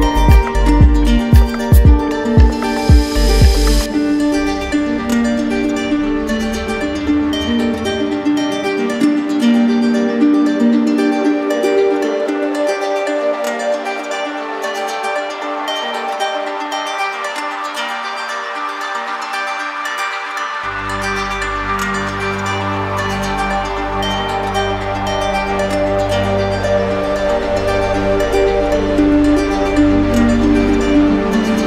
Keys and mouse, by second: 1.5 click, 4.6 click, 5.6 alt+click, 7.0 click, 9.6 click, 10.2 click, 10.8 click, 12.8 click, 16.8 click, 20.3 click, 22.3 click, 23.3 alt+right click, 30.3 click.